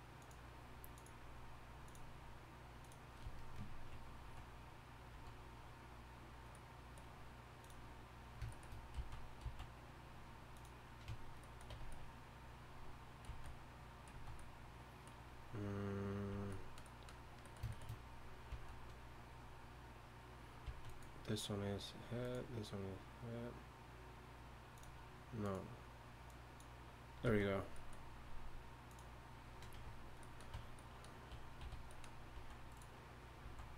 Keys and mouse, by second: 5.1 z, 8.9 z, 9.4 z, 11.1 Tab, 11.7 Tab, 14.1 z, 16.3 z, 18.5 z, 20.6 z, 27.3 z, 29.7 Tab, 29.7 z, 30.5 Tab, 31.6 a, 32.3 z, 33.4 z.